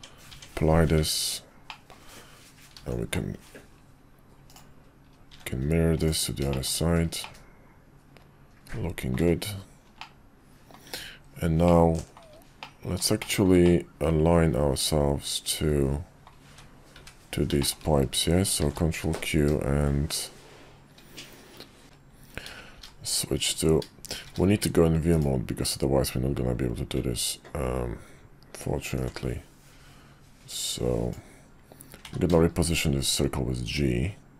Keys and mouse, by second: 0.3 Tab, 0.9 `, 1.7 middle click, 2.8 alt+x, 4.5 click, 5.3 `, 6.0-6.4 drag, 6.5 shift+middle click, 7.2-9.1 middle drag, 10.0-10.7 middle drag, 10.9 `, 11.6-12.2 middle drag, 12.6-13.0 middle drag, 13.2 shift+middle drag, 13.6-16.2 middle drag, 16.4 `, 16.9 `, 17.6 shift+middle click, 18.6 ctrl+q, 21.8 ctrl+shift+q, 24.2 shift+v, 28.9-34.3 ctrl+drag.